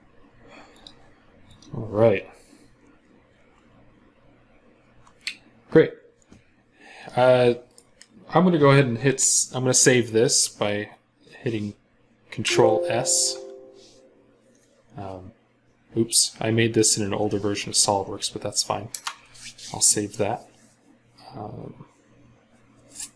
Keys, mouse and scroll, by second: 2.2-4.5 scroll down 1, 6.9 middle click, 12.3 ctrl+s, 18.7 Return.